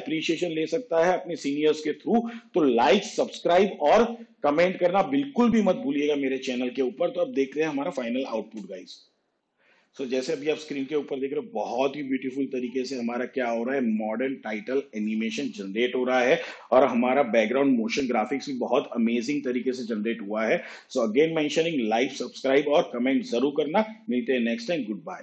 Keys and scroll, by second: 8.8 space.